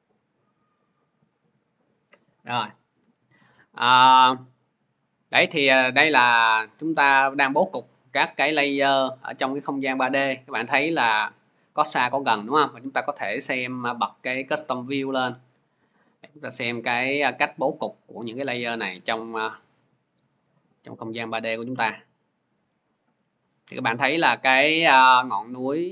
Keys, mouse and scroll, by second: 0.9 click, 7.7 click, 8.5 scroll, 9.4-9.7 scroll, 13.5 click, 13.5 scroll, 14.5 click, 15.2 scroll, 16.1 scroll, 19.3 c, 19.9 scroll, 20.4-22.9 middle drag, 22.9 scroll, 23.8 middle click.